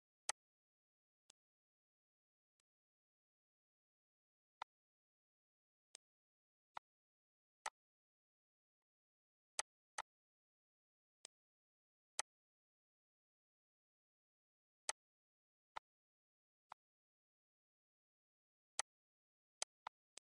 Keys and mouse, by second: 0.5 click, 1.5 click, 2.8 click, 4.8 click, 6.1 click, 6.9 click, 7.8 click, 9.0 click, 9.8 click, 11.4 click, 12.4 click, 15.1 click, 16.0 click, 16.9 click, 19.0 click, 19.8 click.